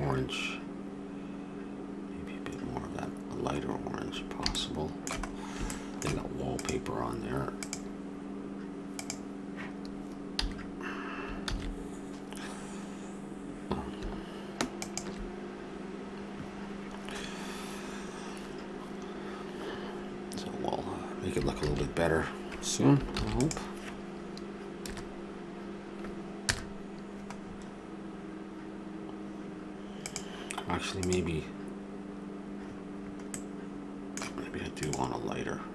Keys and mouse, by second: 6.6-8.2 drag, 10.4 a, 11.5 shift+z, 21.9 shift+z, 23.1 ctrl+s, 24.8 KP_0, 27.4-29.6 middle drag, 30.6-33.3 drag, 33.3-34.8 middle drag, 34.8-35.7 drag.